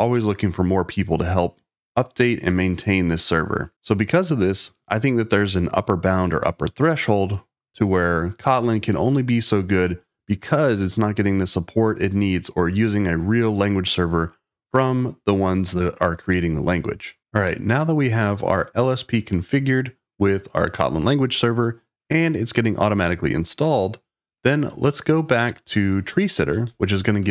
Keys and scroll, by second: 26.2-27.3 typing.